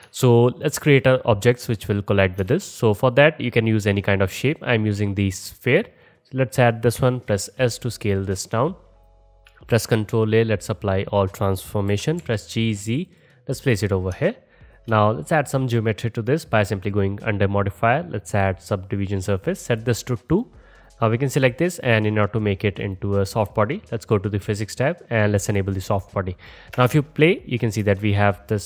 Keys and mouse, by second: 2.5 shift+a, 7.0 s, 9.7 ctrl+a, 11.9 g, 14.3 shift+click, 15.0-28.6 drag, 26.8 space, 27.8 space.